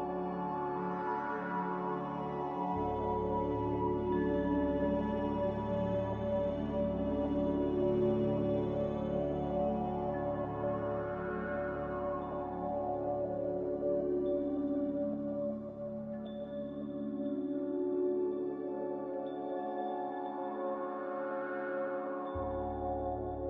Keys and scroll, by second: 0.5 x, 10.3 ctrl+c, 13.3 ctrl+v, 21.9 m.